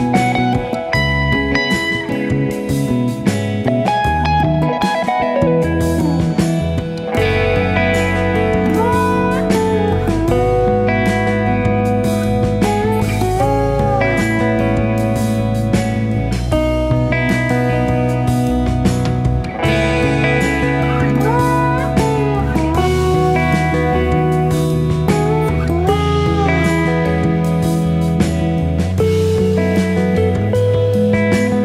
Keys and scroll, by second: 0.9 F1, 1.2-2.1 typing, 3.7-4.7 typing, 6.9 shift+F6, 10.3 F1, 12.2-13.3 typing, 16.0 F1, 16.3-17.8 typing, 24.7 typing, 29.2-29.6 typing, 30.2 shift+F6.